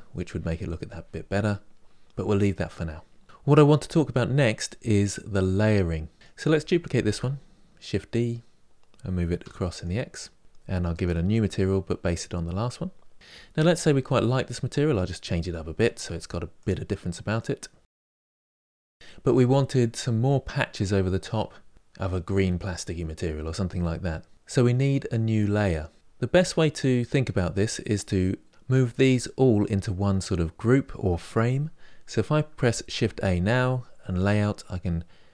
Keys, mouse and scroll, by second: 6.1 click, 6.8 shift+d, 10.7 click, 14.3 click, 15.1 click, 16.9 click.